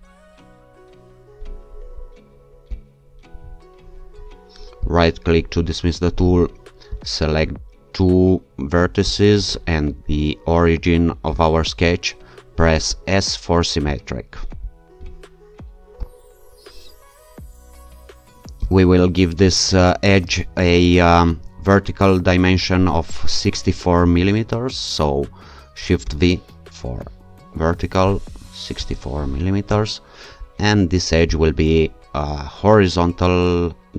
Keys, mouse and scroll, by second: 2.7 click, 4.9 right click, 7.0 click, 9.1 click, 11.4 click, 13.1 s, 16.0 ctrl+r, 18.7 click, 26.0 shift+v, 28.5-29.4 typing, 29.7 Return, 31.3 click.